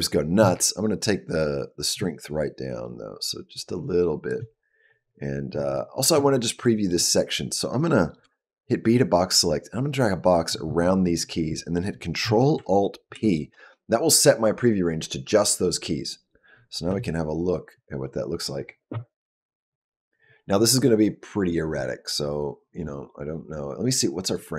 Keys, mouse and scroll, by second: 1.8 click, 6.4 shift+middle click, 8.0 b, 13.0 ctrl+alt+p, 16.8 space, 24.2 click.